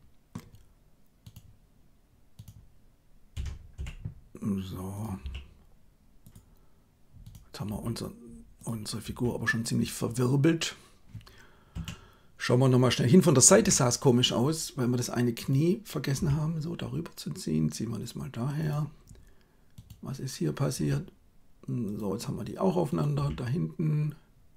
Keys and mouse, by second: 3.3 r, 5.1 g, 7.6 g, 8.9 r, 11.8 KP_3, 13.6 KP_1, 16.2 g, 20.7 g, 23.1 g.